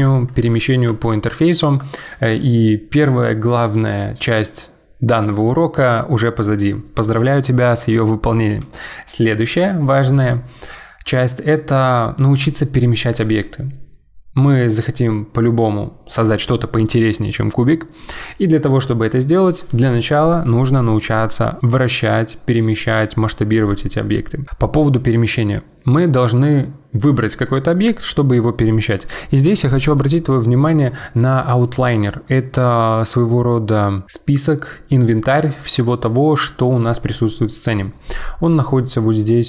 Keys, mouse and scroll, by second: 1.0-4.1 shift+middle drag, 24.4 click, 30.0 click.